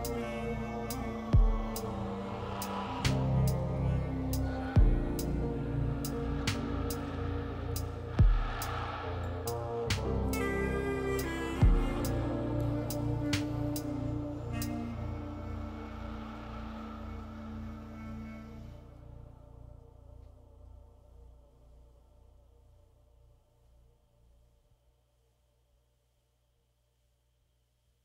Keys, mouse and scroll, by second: 14.3 f, 26.3 ctrl+z.